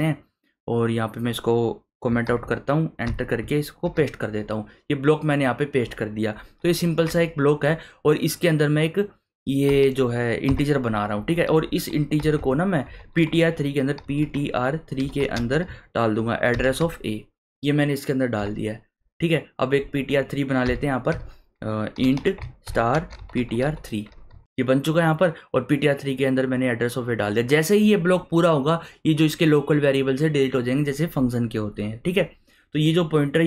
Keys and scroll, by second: 2.2 ctrl+/, 3.0 Return, 3.8 ctrl+v, 7.0 Tab, 10.5 BackSpace, 11.1 `, 11.5 `, 12.2 BackSpace, 12.8 Tab, 13.8-16.8 typing, 20.6 Return, 21.1 Return, 21.7-24.3 typing.